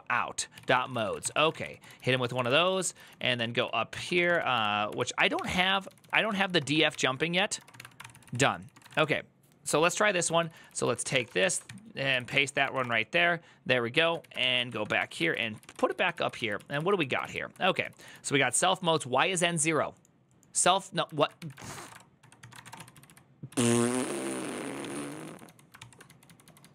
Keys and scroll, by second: 0.0-15.5 typing, 7.8 ctrl+c, 8.1 ctrl+c, 12.1 ctrl+c, 13.8 ctrl+a, 14.1 ctrl+c, 14.5 Up, 15.7 ctrl+u, 17.4-18.3 typing, 20.9-22.4 typing, 22.2 ctrl+c, 22.6 ctrl+u, 22.7 ctrl+u, 23.2 ctrl+u, 24.3-26.4 typing.